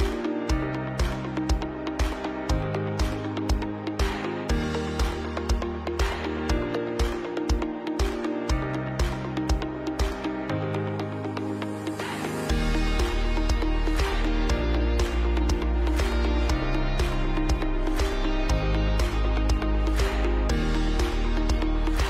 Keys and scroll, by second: 1.5 ctrl+c, 1.6 ctrl+b, 6.8 ctrl+KP_Add, 6.8 ctrl+KP_Add, 7.1 ctrl+KP_Add, 8.6 ctrl+c, 8.7 ctrl+b, 12.2 ctrl+c, 12.5 ctrl+b, 12.9 Down, 13.1 Right, 14.6 Down, 14.7 Down, 14.8 Right, 15.7 ctrl+KP_Subtract, 16.8 space, 17.7 ctrl+alt+space, 19.0 ctrl+alt+space.